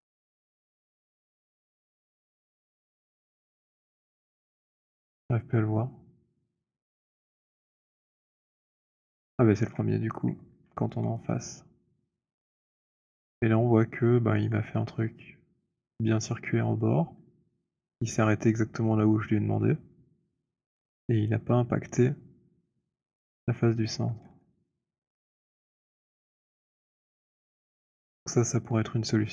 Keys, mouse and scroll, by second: 9.3 shift+right click, 14.3 alt+click, 24.1 alt+click, 24.1 >, 25.9 z.